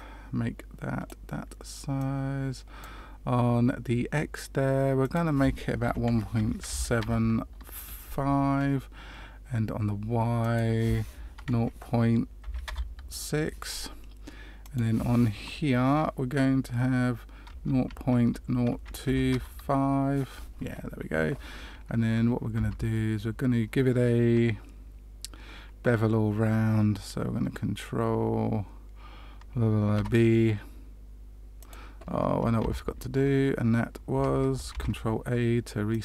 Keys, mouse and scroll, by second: 1.9 click, 6.9 click, 10.4 click, 14.6 click, 22.7 Tab, 30.0 ctrl+b, 32.6 ctrl+z, 34.1 Tab, 34.7 ctrl+a.